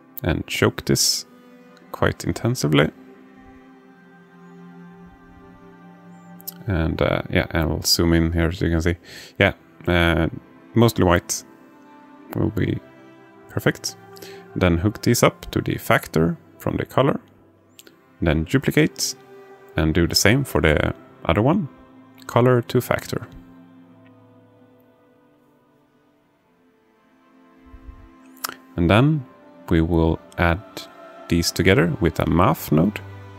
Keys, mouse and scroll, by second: 3.0-4.2 drag, 7.8-11.1 drag, 18.8 alt+shift+middle click, 20.4-21.9 drag, 22.2 click, 23.3 shift+d, 25.7-27.1 drag, 28.5-29.4 drag, 33.1 click.